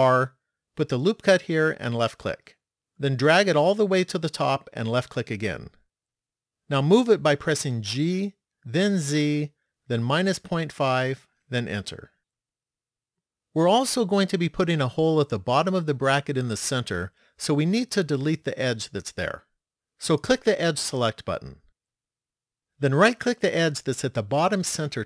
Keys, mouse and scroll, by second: 13.7 middle click, 21.1 click, 24.3 right click.